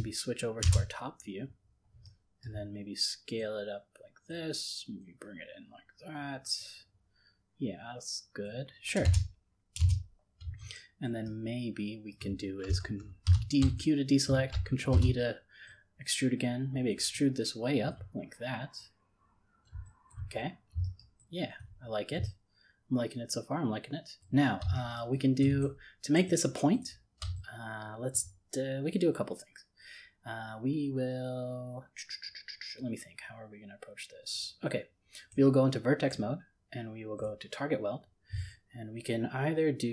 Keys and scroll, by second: 14.9 ctrl+e.